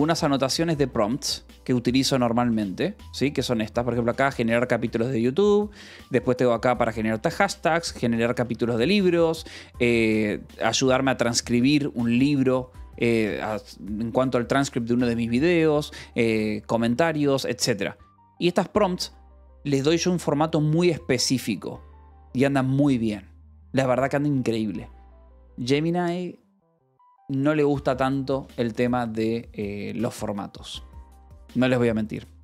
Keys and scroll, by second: 0.2 ctrl+p, 0.5 Return, 2.4 e, 2.9 j, 3.8 k, 4.3 j, 4.8 Escape, 6.2 shift+g, 7.9 j, 8.1 k, 9.6-13.0 typing, 11.4 Escape, 15.7-19.5 typing, 16.2 Escape, 24.7 k.